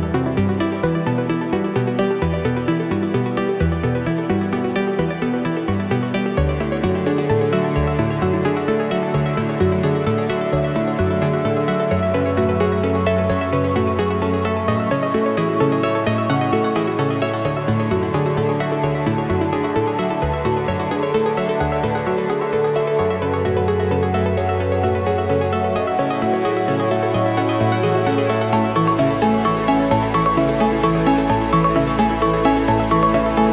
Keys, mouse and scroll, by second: 0.4 click, 1.4 click, 2.7 click, 3.4 click, 4.2 click, 5.0 space, 5.5 click, 6.5 click, 6.8 click, 7.8 1, 8.2 2, 8.9 scroll down 2, 9.3 scroll up 2, 9.9 scroll down 2, 11.0-14.3 drag, 14.8-17.1 drag, 17.6-20.0 drag, 20.2 scroll up 1, 21.2-23.0 drag, 23.5 click, 25.1 click, 26.3 click, 26.8 click, 28.4 click, 28.8 click, 29.2-31.0 drag, 31.1 click, 32.0 scroll down 1, 32.5 click.